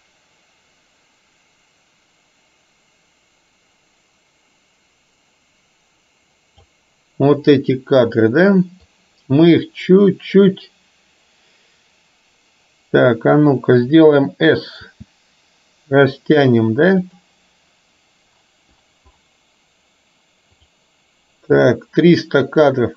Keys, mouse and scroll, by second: 9.0-13.0 drag, 15.0 s, 21.6-22.9 drag.